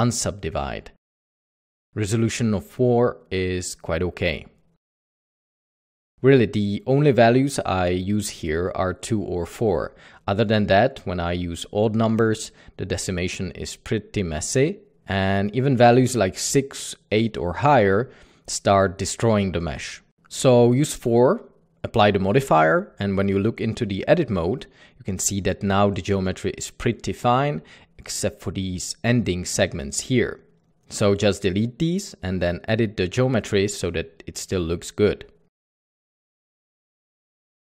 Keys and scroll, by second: 6.0 Tab, 6.3 Tab, 22.9 Tab, 23.0-23.5 typing, 23.3 Tab, 28.3-29.2 typing, 31.1-32.5 typing, 33.9-34.6 typing, 36.6-37.0 typing, 37.5 ctrl+r, 37.7 Escape.